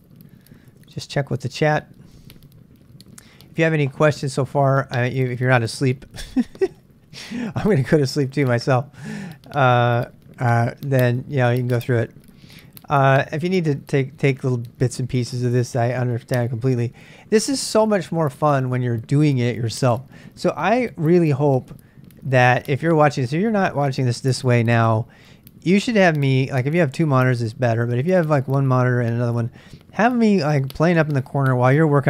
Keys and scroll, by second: 0.7 super+Tab, 0.9 super+Tab, 1.2 super+Tab.